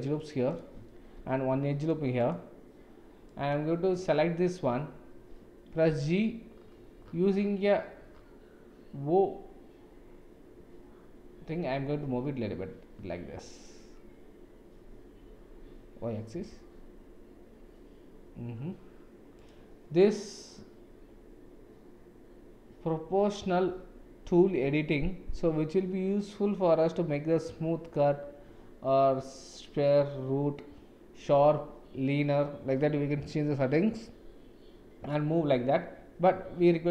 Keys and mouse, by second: 1.1 ctrl+r, 3.2 click, 5.9 g, 28.0-35.1 drag, 36.4 Tab.